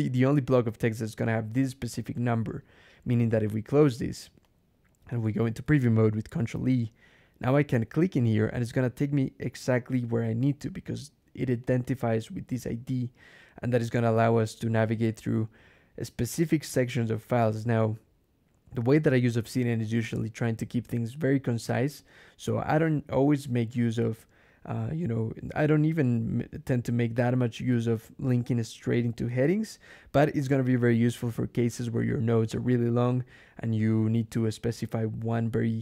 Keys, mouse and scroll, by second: 1.1 click, 2.0 click, 3.6 click, 4.3 click, 6.2 ctrl+e, 8.1 middle click, 10.5 click, 11.5 click, 12.5 click, 20.8-22.1 drag.